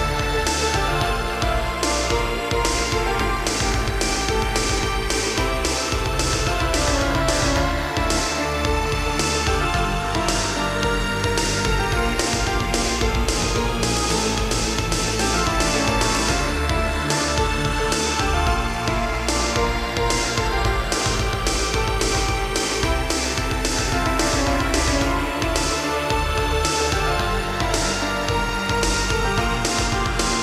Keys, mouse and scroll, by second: 0.1 Right, 0.2 Right, 0.9 shift+Left, 1.9 shift+space, 2.5 Escape, 2.9 Right, 3.2 Right, 3.4 Right, 4.5 Left, 4.7 Left, 4.9 Left, 5.7 Right, 6.3 Right, 7.4 Left, 7.4 ↔, 8.0 Left, 8.6 ↔, 8.9 Right, 10.0 middle click, 11.5 scroll down 1, 12.7 click, 12.8 click, 13.8-14.2 typing, 16.3 click, 16.9 Left, 17.4 Right, 17.9 Right, 19.6 Left, 19.8 Left, 24.1 click, 24.2 click, 25.7 click, 25.8 click, 27.6 click, 28.6 shift+click, 29.8-30.4 typing, 30.0 click.